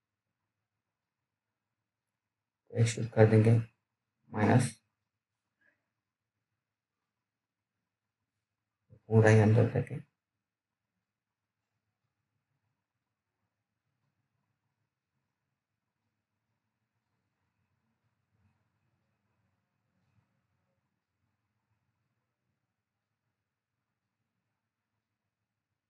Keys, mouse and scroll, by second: 0.9 click, 11.8 alt+middle click, 15.0 click, 23.2 alt+middle click, 24.7 click, 25.4 alt+middle click.